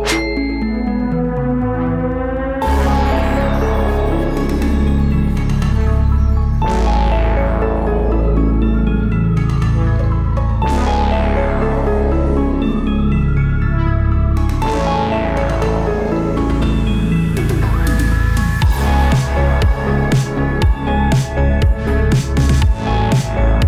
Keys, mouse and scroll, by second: 0.0-0.4 typing, 3.9 typing, 5.1-5.8 typing, 7.0 click, 7.3-9.4 drag, 9.4 s, 10.0 click, 10.9-11.8 typing, 12.9 typing, 13.3 click, 15.9 typing, 16.3 click, 19.4 click, 19.8-20.7 typing.